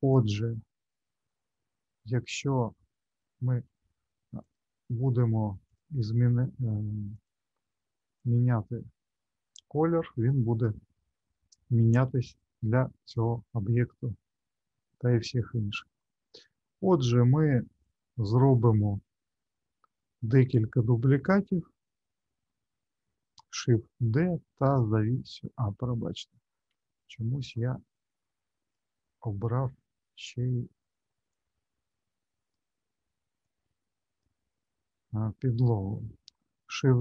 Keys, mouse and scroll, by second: 2.4 scroll up 2, 3.2 middle click, 4.4 click, 5.6 click, 7.1 click, 12.3 click, 13.7-14.2 scroll down 1, 14.2 middle click, 17.8 click, 21.1 alt+middle click, 23.5 shift+d, 27.4 click, 27.9 click, 31.3 click, 33.4 click, 36.7 shift+d.